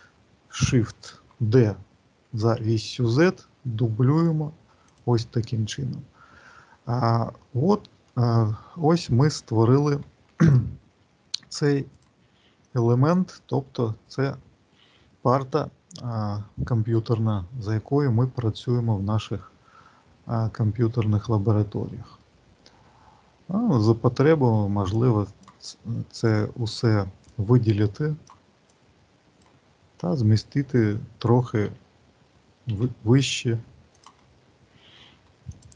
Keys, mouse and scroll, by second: 7.2 middle click, 8.1-9.1 scroll down 6, 9.1 middle click, 10.3 shift+right click, 11.8 click, 12.8 shift+middle click, 19.2 middle click, 20.6 shift+middle click, 22.1 middle click, 24.8 click, 26.2 click, 27.1 click, 28.6 click, 31.6 g, 35.5 click.